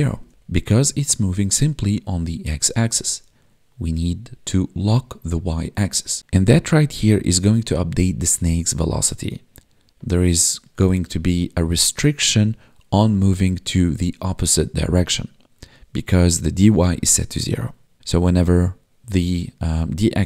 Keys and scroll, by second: 0.2 ctrl+s, 0.3 Tab.